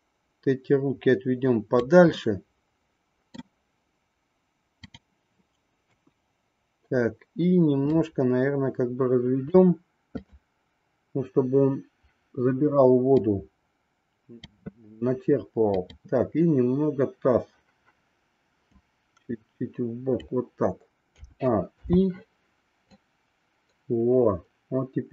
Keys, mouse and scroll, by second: 2.5 middle click, 4.9-6.1 drag, 6.2 KP_1, 7.8-9.5 drag, 10.2-11.7 drag, 13.2-14.6 drag, 18.7-20.3 drag, 21.2 a, 21.8 i, 23.0-25.1 drag.